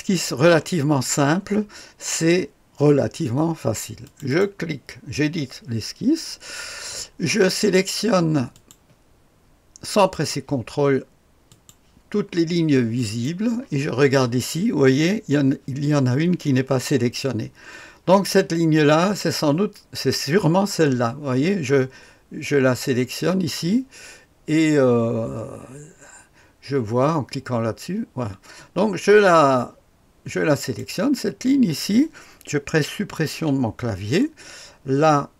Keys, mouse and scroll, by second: 0.1-2.1 scroll down 1, 2.1-4.0 scroll down 1, 4.0 click, 4.3 click, 8.5 click, 10.1 click, 11.5 click, 12.9 click, 30.5 click, 33.2 Delete.